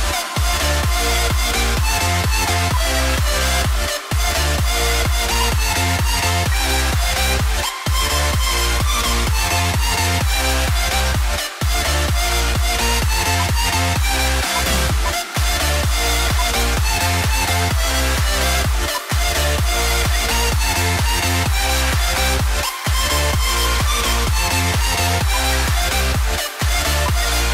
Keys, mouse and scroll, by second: 1.0-1.8 scroll down 1, 2.6 scroll down 1, 2.8 ctrl+g, 4.0-5.3 scroll down 1, 5.6 shift+Page_Up, 6.4 F2, 7.2-8.1 scroll down 1, 8.1 right click, 13.5 ctrl+click, 14.9 shift+click, 19.0 ctrl+click, 19.9 F2, 21.6 right click, 23.0-23.3 scroll down 1, 24.8 double click, 25.3 ctrl+z, 27.1 ctrl+g, 27.4 ctrl+scroll down 1.